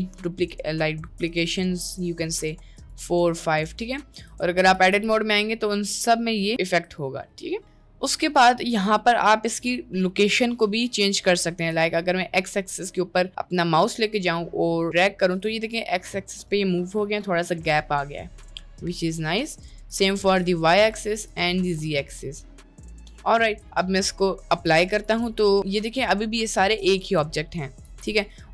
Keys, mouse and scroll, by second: 2.8 click, 3.7 middle click, 4.3 Tab, 5.1 g, 6.5 g, 6.8 Tab, 7.8 middle click, 10.2 middle click, 10.6 middle click, 11.7-15.4 drag, 15.7 middle drag, 16.3 middle drag, 18.6-19.0 middle drag, 19.9 click, 21.3 click, 22.2-22.8 middle drag, 24.7 click, 25.3 Tab, 25.5 Tab, 25.5 click, 25.9 middle click, 27.1 Tab, 27.9 g.